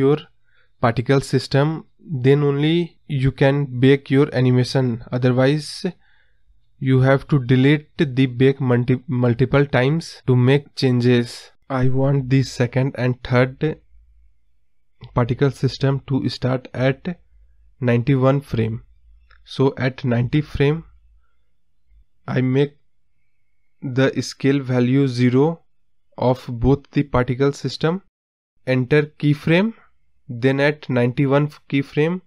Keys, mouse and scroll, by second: 5.7 space, 6.9-7.6 scroll up 5, 8.1 scroll down 3, 9.5 space, 10.1 space, 10.8 scroll down 2, 12.1 space, 12.3 space, 14.5-16.8 typing, 18.0 space, 18.4 space, 19.0-22.9 drag, 23.0-26.9 scroll down 1, 26.9-29.3 drag, 29.3 right click, 30.3 Right.